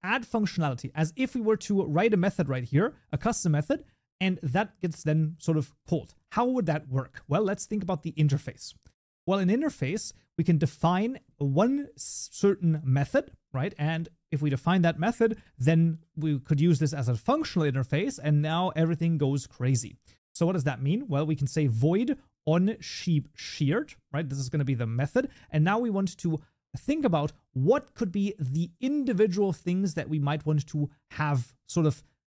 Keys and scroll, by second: 3.7 ctrl+BackSpace, 14.2 ctrl+s.